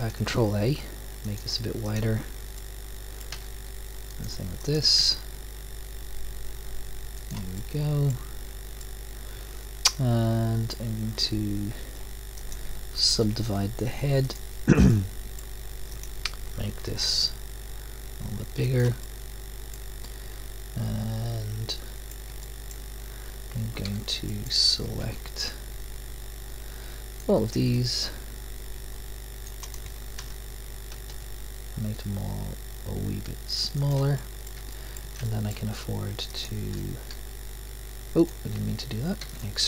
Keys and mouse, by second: 0.2 ctrl+a, 3.4 ctrl+a, 5.1 ctrl+a, 9.4-10.6 middle drag, 12.4-14.2 drag, 14.8 middle click, 15.3 click, 16.3 middle click, 17.0 ctrl+a, 22.1 middle click, 23.8 a, 25.0 c, 29.7 click, 30.9 ctrl+a, 35.6-36.3 drag, 37.1 e, 39.2 x.